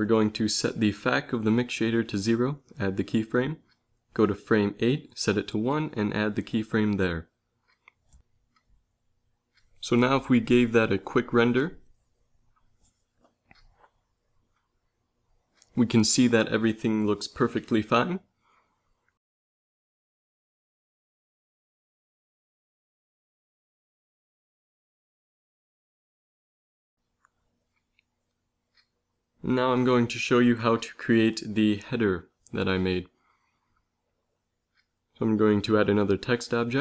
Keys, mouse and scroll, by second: 1.9 i, 3.7 Right, 5.8 i, 7.9 ctrl+s, 8.9 shift+Left, 9.8 shift+z, 12.7 Right, 12.9 Right, 13.1 Right, 13.4-13.8 Right, 14.0 Right, 14.3 Right, 14.5-15.2 Right, 15.4 Right, 15.6 Right, 16.1 Right, 16.3 Right, 16.5 Right, 16.7 Right, 17.1 Right, 17.3 Right, 17.5 Right, 17.7 Right, 18.2 Right, 18.4 Right, 18.6 Right, 18.8 Right, 19.0 Right, 19.2-19.7 Right, 19.9 Right, 20.1 Right, 20.3 Right, 23.0 ctrl+s, 28.5 z, 28.6 z, 31.2 shift+s, 33.8 shift+a, 36.1 g.